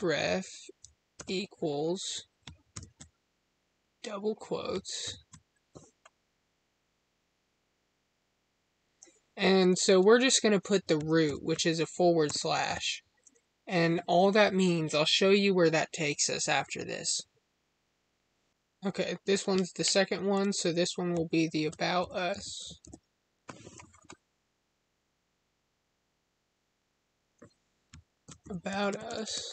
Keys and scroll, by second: 29.1 space.